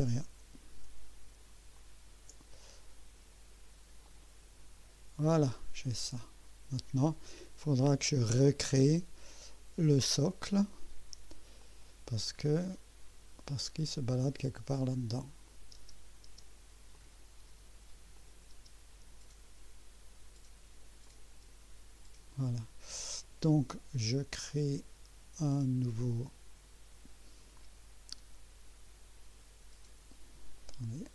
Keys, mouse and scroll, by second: 1.7 ctrl+click, 4.0 click, 5.6-7.3 drag, 7.7-8.5 right drag, 8.8-9.4 right drag, 11.6 click, 12.1 scroll down 1, 12.4 scroll up 1, 13.1 scroll down 1, 15.4 click, 15.7 space, 16.9 click, 17.4 space, 18.1 click, 18.5 space, 21.0 click, 21.4 space, 23.3 scroll down 2, 31.0 click.